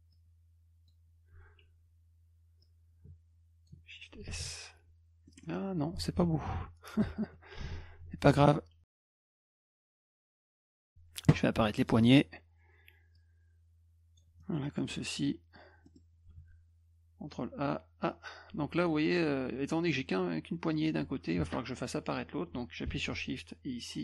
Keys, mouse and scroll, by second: 0.1 click, 2.6-3.7 drag, 4.4 s, 5.3 middle click, 5.4 middle click, 6.3 ctrl+z, 7.8 ctrl+shift+z, 9.2 click, 10.1 click, 11.8 click, 13.1-14.2 drag, 14.4 middle click, 14.8 middle click, 15.8 middle click, 16.4 ctrl+a, 17.3-21.3 drag, 23.1-24.0 shift+drag.